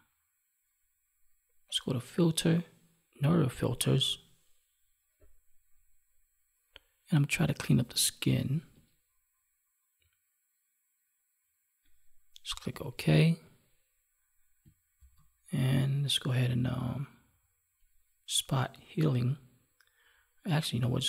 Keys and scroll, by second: 14.9 ctrl+d.